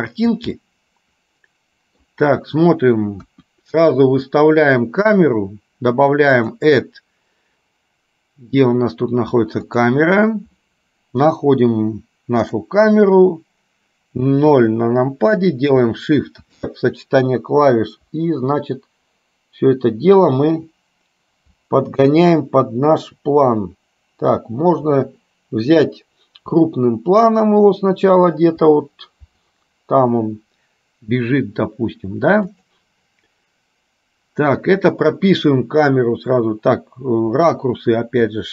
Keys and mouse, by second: 0.6-2.3 middle drag, 6.6-10.1 drag.